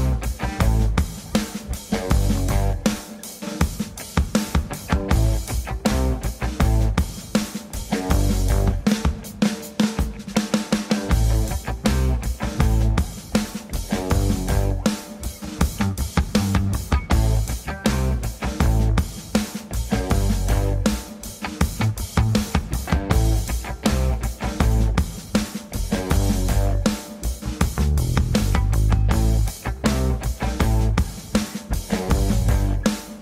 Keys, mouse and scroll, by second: 1.2 alt+middle click, 1.5 alt+middle click, 1.9 scroll down 3, 2.1 shift+middle click, 2.7-3.3 scroll up 1, 3.3 scroll up 1, 3.9 click, 4.1 g, 5.2 scroll down 2, 5.5 b, 5.8 g, 6.4-6.9 scroll up 2, 6.9 click, 7.1 click, 7.4 scroll down 1, 7.5 b, 8.2 ctrl+space, 9.1 click, 9.9 click, 10.2 click, 10.4 click, 12.1 click, 12.4 b, 12.9 g, 13.4 ctrl+c, 14.3 click, 15.5 ctrl+z, 16.1 click, 16.9 click, 17.4 click, 17.7 click, 18.6 ctrl+s, 18.6-19.5 scroll up 2, 20.1 click, 20.4 scroll down 5, 20.8-22.0 scroll up 6, 22.0 click, 22.0 scroll up 1, 22.2-23.4 scroll down 35, 23.3 scroll up 1, 23.4-23.9 scroll down 6, 24.0 shift+click, 24.1-25.9 scroll up 47, 26.1 click, 27.0 click, 27.4 click, 27.6-27.9 scroll down 4, 27.8 click, 27.9 b, 28.2 shift+middle click, 28.4 scroll up 4, 28.7 g, 29.7 z, 29.9-30.2 scroll up 3, 30.6 click, 31.3 alt+g, 31.4 scroll down 3, 31.6 click, 32.3 click, 32.7 click.